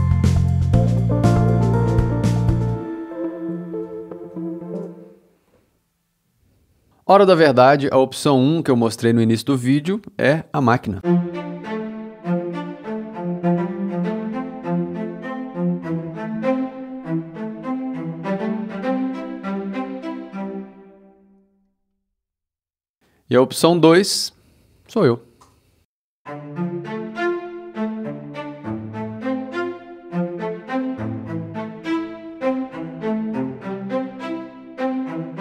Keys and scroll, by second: 1.8 e.